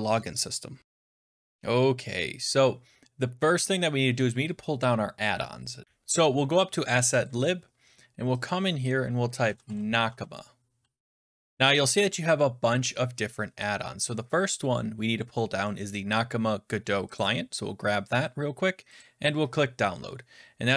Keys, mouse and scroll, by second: 7.3 click, 8.4 click, 9.1-10.5 typing, 17.1 click, 18.9 click.